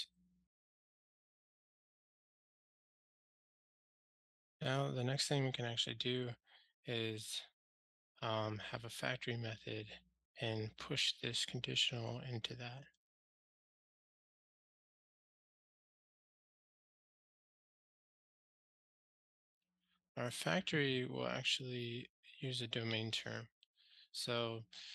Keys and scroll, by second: 3.3 super+BackSpace, 3.3 ctrl+alt+shift+r.